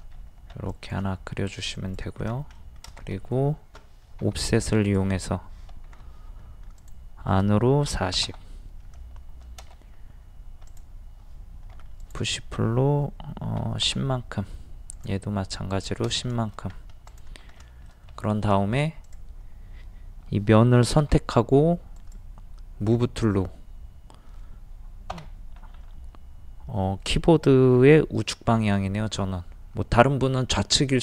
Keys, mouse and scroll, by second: 0.1-0.5 scroll up 1, 0.7 click, 2.2 scroll down 1, 2.6 middle click, 3.1 middle click, 4.2 o, 4.8 click, 5.9 ctrl+z, 6.8 click, 7.9 KP_4, 8.0 KP_0, 10.7 click, 11.7 p, 12.0 click, 13.6 KP_1, 13.7 KP_0, 14.9 click, 16.3 middle click, 16.7-17.1 scroll up 1, 17.1 click, 17.6 middle click, 18.6 shift+middle click, 19.0 click, 21.0 m, 21.9 click, 25.1 Right.